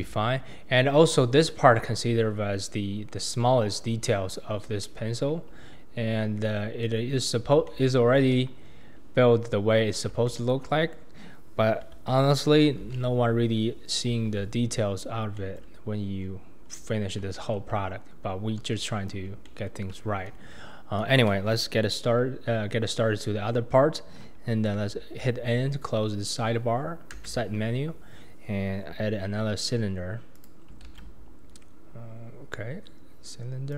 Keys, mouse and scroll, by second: 0.0 Tab, 0.2-1.3 scroll down 5, 1.3-2.4 shift+middle drag, 2.4-3.7 scroll down 9, 3.7-4.1 scroll down 3, 4.1-4.5 shift+middle drag, 4.5-4.8 shift+scroll up 3, 4.8-6.3 middle drag, 6.3-6.8 scroll up 3, 6.8-8.3 middle drag, 8.3 KP_1, 8.6-9.2 scroll down 2, 9.2-10.3 scroll up 7, 10.3-12.8 shift+middle drag, 12.8 alt+z, 13.4-14.2 scroll up 3, 14.2 alt+z, 15.0-15.4 scroll down 2, 15.4-15.8 shift+middle drag, 15.8-16.2 scroll up 2, 16.2-17.3 scroll down 6, 17.3-17.9 shift+middle drag, 17.9-18.5 scroll up 1, 18.5-19.1 scroll up 2, 19.1-19.4 scroll down 2, 19.4-22.4 shift+middle drag, 27.2 n, 30.3 click, 30.9 shift+a.